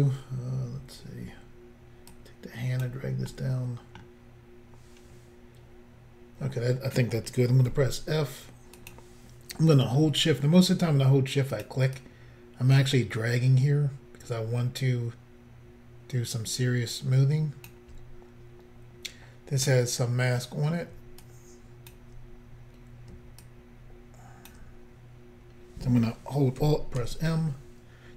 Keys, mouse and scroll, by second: 0.9-2.1 scroll up 1, 2.1 click, 3.4 middle click, 4.1 scroll up 1, 7.7 f, 8.8 click, 11.5 shift+click, 12.0 shift+click, 19.7 middle click, 21.3 shift+click, 27.0 alt+m.